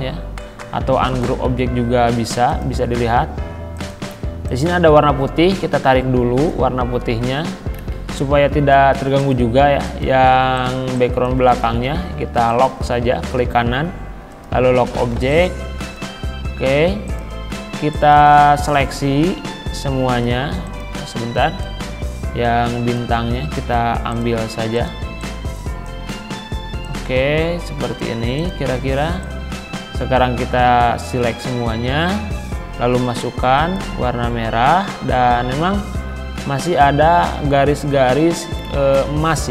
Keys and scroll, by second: 11.9 ctrl+z, 14.9 z.